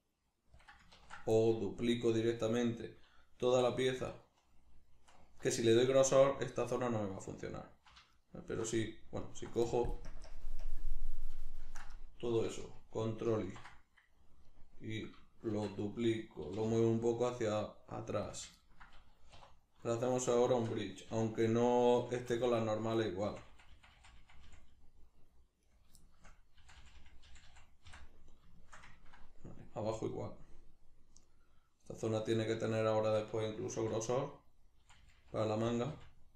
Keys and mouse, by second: 0.7 click, 1.0 ctrl+z, 1.4-4.1 middle drag, 3.5 3, 4.1 alt+right click, 8.2 alt+shift+right click, 9.2 alt+right click, 10.1 ctrl+KP_Add, 13.4 ctrl+i, 14.5-16.0 middle drag, 15.5 shift+d, 16.0 right click, 16.4 g, 18.4 click, 18.6-20.0 ctrl+middle drag, 19.4 2, 20.0 right click, 20.4 shift+right click, 21.1 f, 21.6 right click, 22.0 f, 23.0 right click, 23.2 f, 24.7 middle click, 25.6 right click, 26.0-32.0 shift+middle drag, 26.6 f, 32.0 right click, 32.9 shift+right click, 33.8 f, 34.3 right click, 34.8 f.